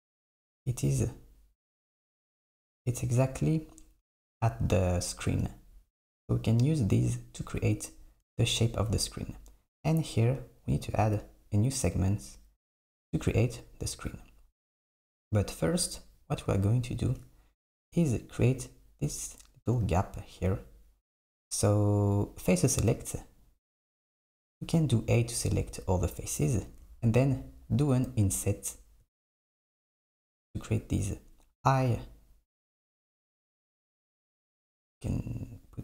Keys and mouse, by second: 22.6 click, 24.6 a.